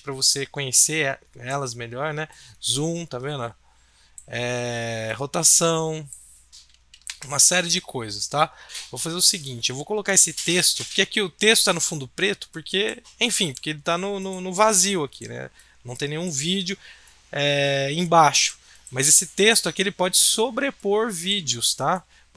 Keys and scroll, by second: 7.1 ctrl+z.